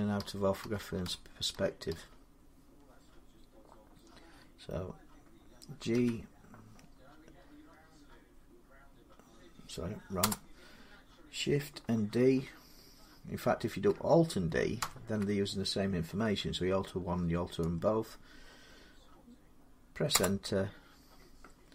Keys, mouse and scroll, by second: 0.0-1.7 typing, 5.7 g, 10.0 Return, 14.6 alt+d, 19.9 Return.